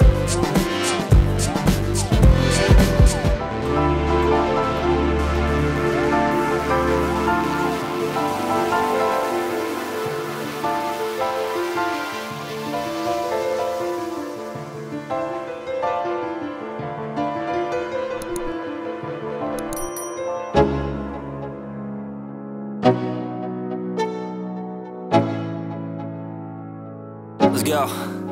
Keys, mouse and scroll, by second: 1.7 click, 3.6-4.1 drag, 4.5-5.1 drag, 6.4 shift+middle drag, 7.3 middle click, 7.8-8.2 drag, 8.6-9.1 drag, 10.7 space, 16.4 space, 17.0 click, 20.3 click, 24.6 space.